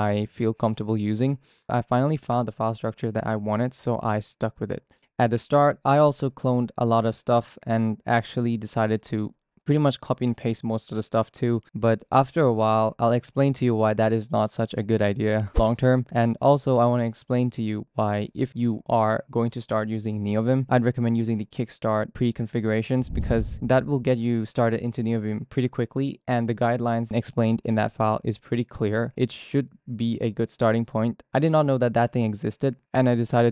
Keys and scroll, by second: 24.4 typing, 30.9 space.